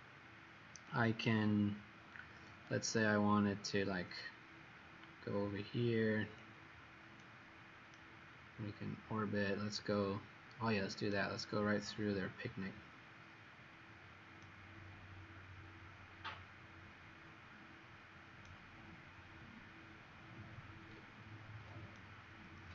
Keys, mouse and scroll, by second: 1.0 right click, 4.5 scroll up 2, 5.4-6.3 scroll up 1, 6.3 click, 7.9 right click, 12.6 scroll up 1, 14.3 right click, 19.8-20.8 scroll up 3, 21.9 right click.